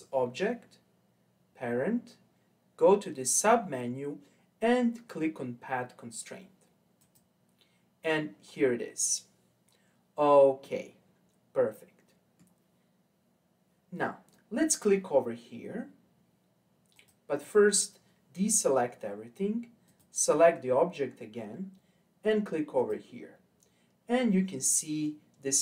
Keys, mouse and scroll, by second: 8.5-9.1 scroll down 2, 9.1-10.6 scroll down 4, 10.6-13.6 middle drag, 16.9 click, 19.8 click, 22.8 click.